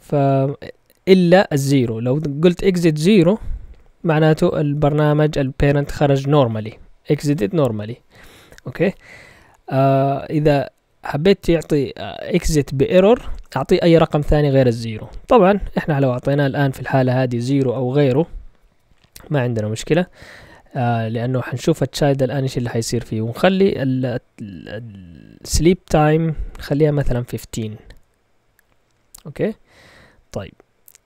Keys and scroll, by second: 2.0 0, 3.6 Right, 4.6 !, 11.4 Left, 13.3 BackSpace, 15.4 0, 21.7-28.5 typing, 22.0 Down, 22.2 Down, 28.6 Up.